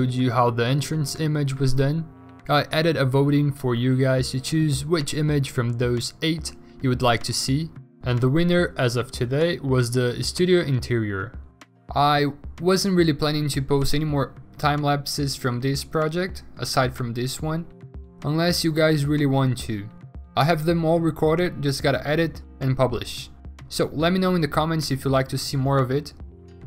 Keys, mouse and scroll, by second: 1.8 x, 3.1 w, 3.6 ctrl+d, 4.4 ctrl+d, 7.9 b, 8.8 ctrl+z, 8.9 0, 9.5 ctrl+z, 9.9 ctrl+d, 10.3 ctrl+alt+z, 11.1 5, 11.9 ctrl+d, 12.3 ctrl+z, 13.5 v, 16.5 ctrl+g, 16.9 l, 17.9 Return, 18.4-19.4 typing, 23.2 alt+Tab, 23.4 Return, 23.6 v, 25.5-26.6 typing, 25.5 ctrl+d.